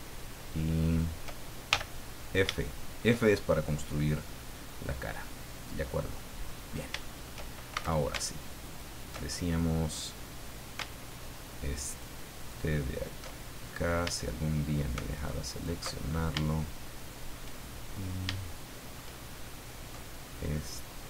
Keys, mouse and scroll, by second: 0.8 shift+right click, 1.7 shift+f, 2.0-2.4 scroll down 2, 2.6 shift+click, 3.3 shift+click, 4.3 click, 5.5-6.6 drag, 7.0 shift+click, 7.7 shift+a, 8.6 alt+shift+right click, 9.3-10.6 alt+shift+scroll up 7, 11.3 alt+shift+right click, 11.9 alt+shift+right click, 12.4 alt+shift+right click, 12.9 alt+shift+right click, 13.4-13.9 alt+shift+scroll up 3, 14.2 shift+middle click, 15.5 alt+shift+right click, 15.9 alt+shift+scroll down 2, 16.5-17.5 shift+middle drag, 17.9-18.3 shift+scroll up 1, 18.4 shift+middle click, 19.3-19.6 shift+scroll up 1.